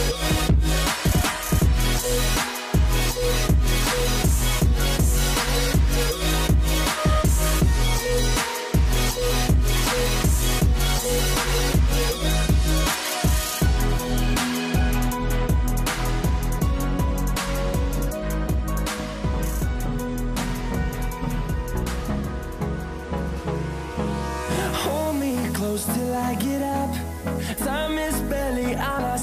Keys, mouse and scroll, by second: 11.9 v, 13.4-15.4 scroll down 1, 18.4 double click, 23.3 g, 28.2 double click.